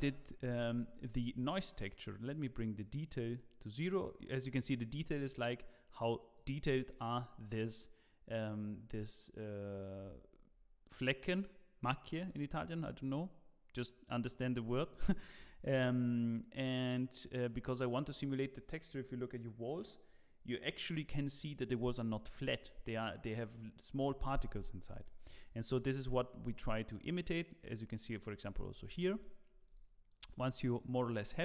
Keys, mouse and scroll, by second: 2.7 middle click, 2.7 click, 15.7 click, 24.8 middle click, 25.0-25.7 scroll down 2, 25.4 middle click, 28.2 middle click, 28.7-29.7 scroll down 2, 28.9 middle click, 29.7 click, 30.9 click.